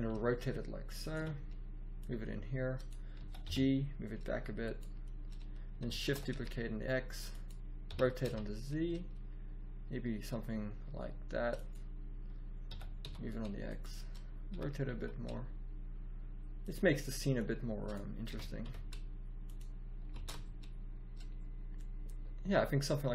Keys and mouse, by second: 1.1 z, 1.9 click, 2.1 click, 3.1 g, 5.9 shift+d, 7.8 r, 12.7 g, 14.4 r, 18.3 r, 20.3 shift+z.